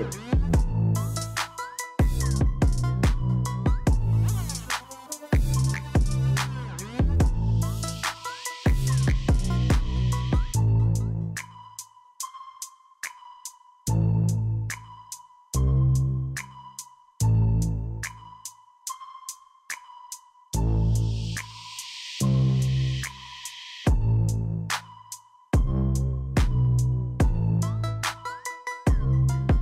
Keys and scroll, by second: 0.3 ctrl+shift+Escape, 2.3 alt+d, 6.3 Escape, 8.3 End, 10.8 Right, 13.1 s, 14.6 s, 16.5 s, 18.5 Tab, 20.5 Return, 22.5 Tab, 24.5 Tab, 26.5 Down, 27.8 Down, 29.5 Return.